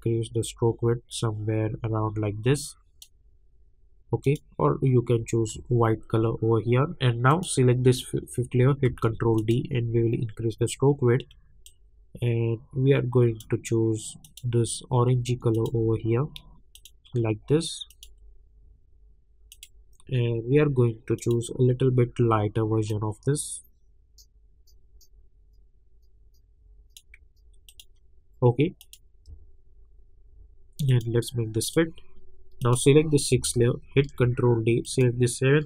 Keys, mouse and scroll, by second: 5.8-6.3 alt+scroll up 2, 6.3-7.3 scroll up 1, 7.3 click, 8.9 ctrl+d, 9.4 click, 11.6-27.7 drag, 29.3 alt+scroll down 1, 29.9 alt+scroll up 1, 30.9 click, 33.9 ctrl+d, 34.8 click.